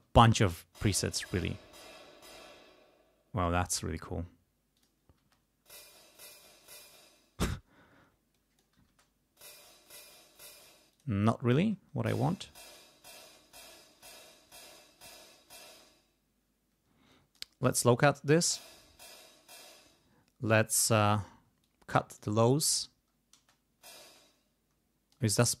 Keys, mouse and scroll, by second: 0.2 space, 2.3 space, 4.7 click, 5.2 space, 6.6 space, 8.3 click, 8.9 space, 10.4 space, 10.9 click, 11.5 space, 15.6 space, 17.1 click, 18.0 space, 19.6 space, 20.4 click, 21.6 click, 23.3 space, 24.0 space, 24.1-25.3 drag.